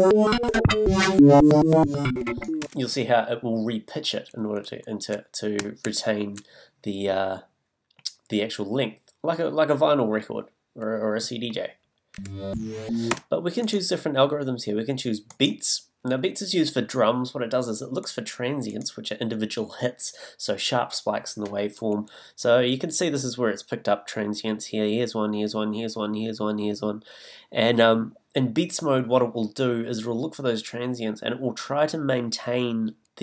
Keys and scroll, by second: 2.6 space, 4.7 z, 5.8 super+z.